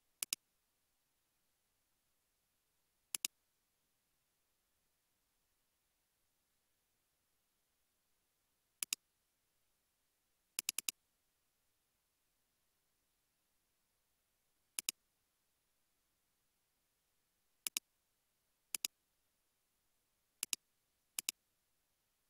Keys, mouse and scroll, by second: 1.9 space, 6.0 space, 10.8 double click, 15.8-17.4 scroll up 1.